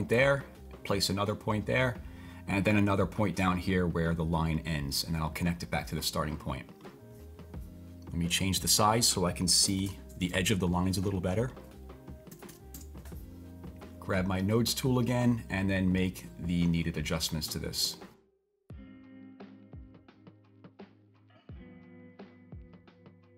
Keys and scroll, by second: 9.4-10.3 typing, 12.3-13.4 typing, 12.7 Return, 22.1 typing.